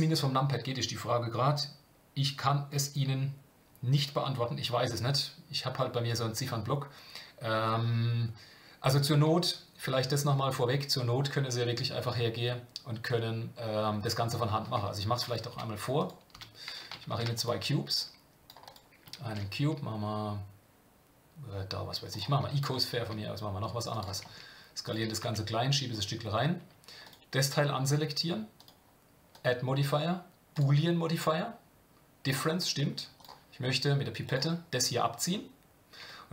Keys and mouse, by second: 15.5 Delete, 16.0 click, 16.3 Delete, 17.1 shift+a, 24.2 s, 25.0 g, 27.0 click, 29.3-30.6 drag, 33.2 click.